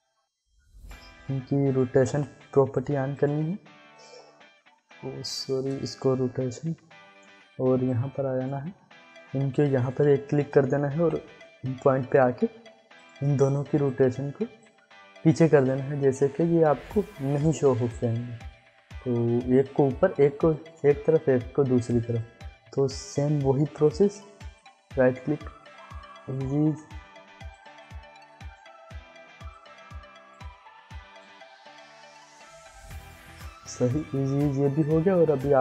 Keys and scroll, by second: 2.0 ctrl+s, 6.2 r, 10.9 i.